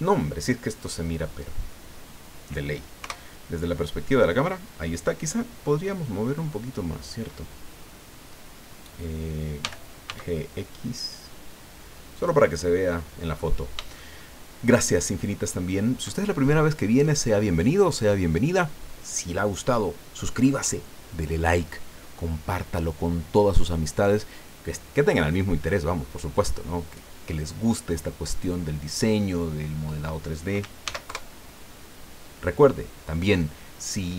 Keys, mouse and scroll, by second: 1.5 scroll down 2, 3.0 KP_0, 9.6 g, 10.1 x, 12.1 click, 13.3-13.8 scroll down 2, 14.0-15.8 shift+drag, 30.8 ctrl+s, 31.0 ctrl+KP_Enter.